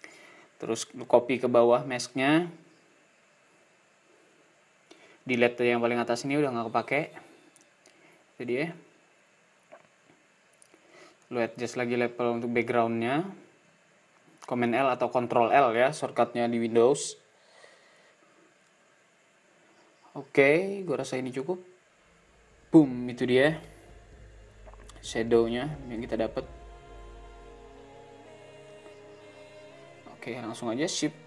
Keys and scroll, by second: 31.0 alt+shift+super+s.